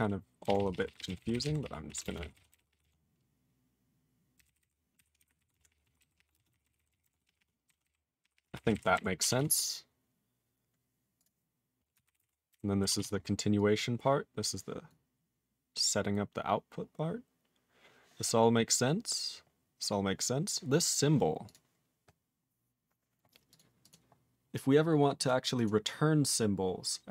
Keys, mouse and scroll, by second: 0.4 ctrl+e, 0.6 ctrl+p, 0.7 ctrl+p, 0.8 ctrl+p, 0.9 ctrl+p, 1.0 ctrl+a, 1.2 ctrl+k, 1.3 ctrl+n, 1.5 ctrl+k, 1.6 ctrl+p, 1.9 ctrl+p, 2.0 ctrl+space, 2.1 ctrl+n, 2.2 ctrl+e, 2.2 ctrl+n, 2.3 ctrl+e, 2.5 ctrl+g, 2.5 ctrl+p, 2.7 ctrl+p, 2.8 ctrl+a, 4.3 ctrl+k, 4.4 ctrl+n, 4.6 ctrl+n, 4.9 ctrl+o, 5.2 ctrl+n, 5.2 ctrl+o, 5.4 ctrl+y, 5.5 ctrl+a, 5.5 ctrl+p, 5.7 ctrl+p, 5.8 ctrl+p, 6.0 ctrl+k, 6.2 ctrl+p, 6.3 ctrl+space, 6.4 ctrl+e, 6.5 ctrl+n, 6.7 ctrl+e, 6.8 ctrl+n, 6.9 ctrl+e, 7.0 ctrl+g, 7.1 ctrl+p, 7.2 ctrl+p, 7.4 ctrl+p, 7.6 ctrl+n, 7.7 ctrl+a, 7.8 ctrl+k, 8.2 ctrl+p, 8.3 ctrl+p, 8.4 ctrl+space, 8.5 ctrl+e, 8.7 ctrl+n, 8.7 ctrl+e, 8.9 ctrl+g, 9.4 ctrl+s, 10.6-11.1 scroll down 1, 11.2 click, 12.0 ctrl+n, 12.2 ctrl+space, 12.2 ctrl+n, 12.5 ctrl+g, 12.9 ctrl+s, 13.6 click, 13.7 click, 14.4 click, 14.9 click, 16.1-16.7 scroll up 2, 17.3 scroll up 3, 18.4-19.0 scroll up 3, 19.0-20.0 scroll up 7, 20.9 click, 20.9 click, 21.4 click, 21.5 click, 22.2-23.4 scroll down 5, 23.5 click, 23.5 click, 23.8 click, 23.9 click, 25.2 click, 25.2 click, 25.5 click, 25.6 click.